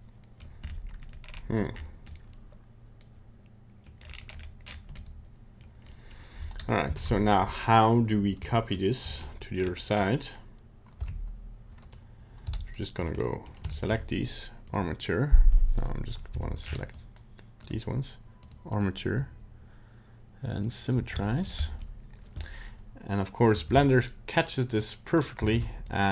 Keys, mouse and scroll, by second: 0.6-1.0 scroll up 3, 1.0 middle click, 1.1-1.4 scroll down 5, 1.7 scroll up 2, 2.1 middle click, 4.0 middle click, 4.0-4.5 scroll down 9, 4.6-5.0 scroll up 7, 5.0 middle click, 6.0 middle click, 6.0 scroll down 1, 6.2 middle click, 6.2 scroll up 1, 7.0 ctrl+Tab, 8.7 shift+click, 9.2 middle click, 9.5 middle click, 9.6 scroll down 3, 9.9-10.4 scroll up 2, 11.1 Tab, 12.5 a, 13.4 middle click, 13.7 shift+middle click, 14.7 click, 16.3 right click, 16.3 c, 18.4 click, 18.7 click, 21.3 shift+middle click, 21.5 shift+middle click, 21.7 middle click, 21.8 middle click, 23.7 ctrl+Tab, 25.2 right click, 25.5 ctrl+Tab.